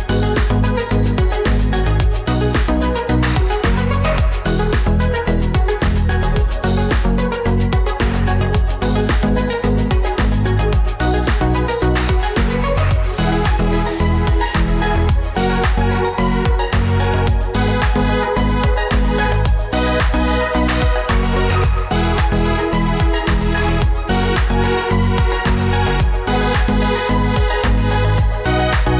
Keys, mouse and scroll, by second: 4.4 ctrl+j, 9.9 ctrl+j, 13.4 ctrl+j, 17.8 ctrl+j, 21.3 ctrl+j, 28.5 ctrl+-.